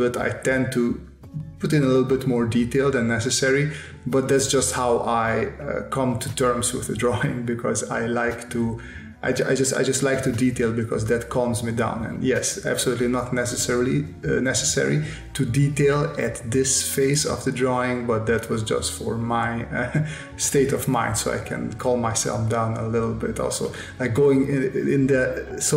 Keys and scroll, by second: 1.2 space, 3.3 s, 6.5 space, 8.0 s, 9.8 s, 11.3 space, 13.9 space, 15.0 space, 16.8 space, 20.3 space, 22.1 space, 23.6 space, 25.2 space.